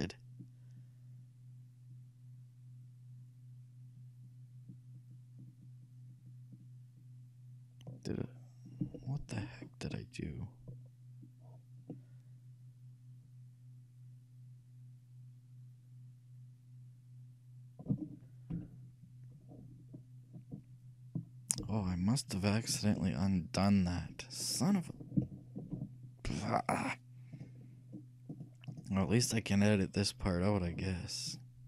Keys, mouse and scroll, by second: 8.3 middle click, 9.1-16.5 shift+middle drag, 18.6 KP_3, 19.6-27.1 middle drag, 21.7 KP_1, 26.5-28.3 shift+drag, 28.4-31.1 drag, 31.4-31.6 drag.